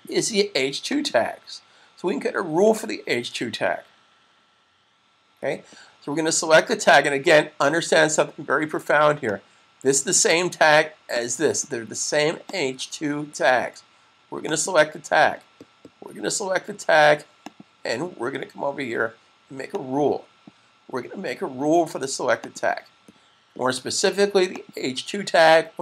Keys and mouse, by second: 9.2 click, 17.4 click, 22.2 click.